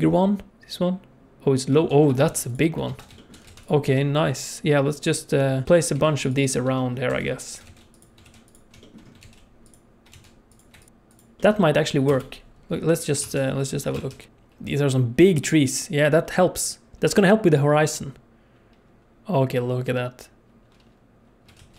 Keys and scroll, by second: 1.9 ctrl+s, 2.3 alt+a, 2.9 ctrl+s, 3.4 alt+a, 3.8 g, 5.6 r, 5.9 shift+d, 7.1-10.1 typing, 11.4 ctrl+shift+s, 12.1 KP_0, 13.2 ctrl+space, 13.9 ctrl+alt+space, 14.3 alt+shift+z, 21.6 alt+shift+z.